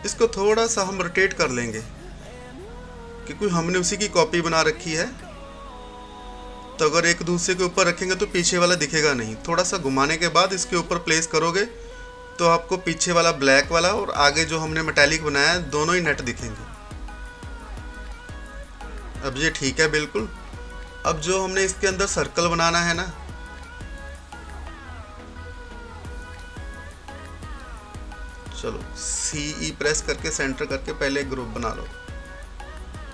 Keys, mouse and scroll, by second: 0.4-6.2 drag, 6.2-8.5 drag, 8.5 scroll down 1, 9.6-14.4 drag, 14.6-17.2 drag, 17.2 c, 18.6 e, 19.6 scroll down 1, 21.2-26.7 drag, 26.7-27.0 typing, 27.6 click, 28.1-28.6 scroll up 2, 29.9 scroll down 1.